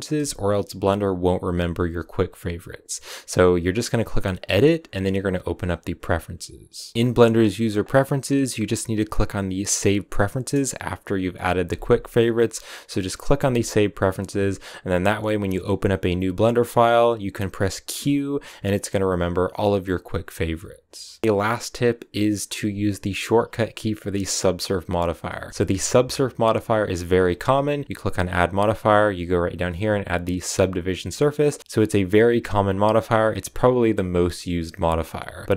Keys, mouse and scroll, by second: 16.4-25.3 middle drag, 25.3 right click, 25.3-30.4 shift+middle drag, 30.4 click, 30.9-35.5 middle drag.